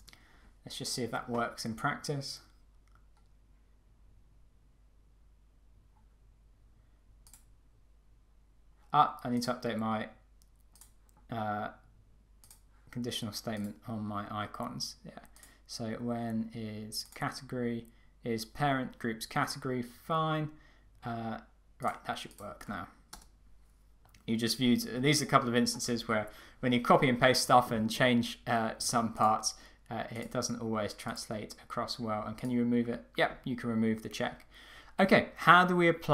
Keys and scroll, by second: 0.0 Return, 23.1 Return.